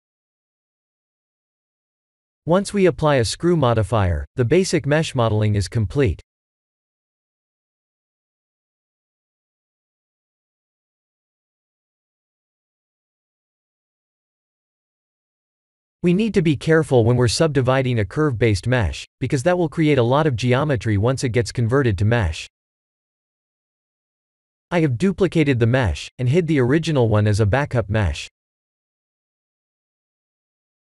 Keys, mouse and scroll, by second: 4.1 click, 5.0-6.5 drag, 7.3 Tab, 7.8 Tab, 8.3-11.9 alt+middle drag, 12.4 ctrl+3, 13.3-18.9 alt+middle drag, 20.7 shift+d, 22.6 click, 23.6 click, 26.4 click, 26.7 ctrl+a, 29.2-30.8 ctrl+right drag.